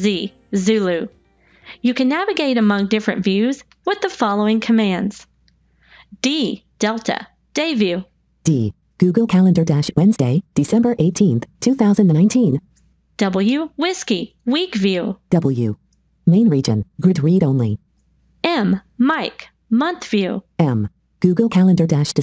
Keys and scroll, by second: 5.9 d, 13.0 w, 18.2 m.